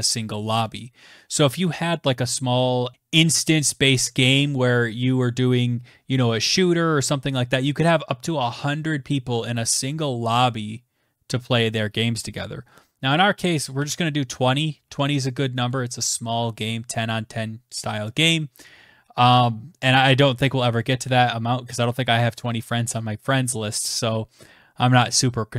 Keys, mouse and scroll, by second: 12.4-14.5 typing.